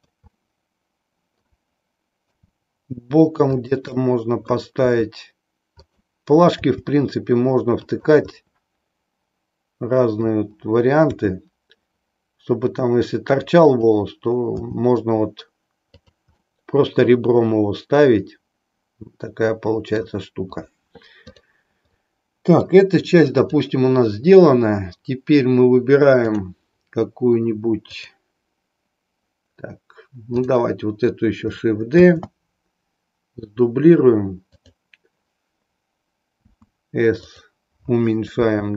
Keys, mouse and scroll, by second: 0.3-1.6 middle drag, 2.4 r, 3.6 click, 4.0 middle click, 4.8 r, 5.8 click, 6.7 g, 8.3-10.3 middle drag, 11.1 r, 13.7 click, 14.6 g, 16.1 drag, 16.5-20.1 middle drag, 21.2 click, 22.1-22.7 middle drag, 23.5 click, 26.1 click, 27.9 click, 30.3 click, 32.1 shift+d, 34.6 click, 36.3 s, 38.5 g.